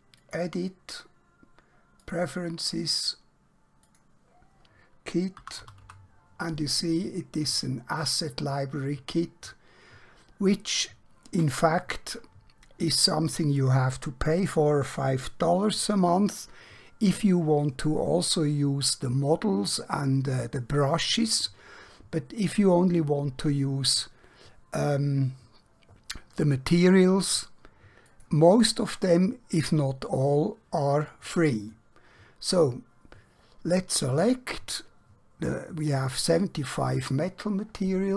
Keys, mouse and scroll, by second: 5.5 typing, 8.1 typing, 28.2 click, 35.9 click.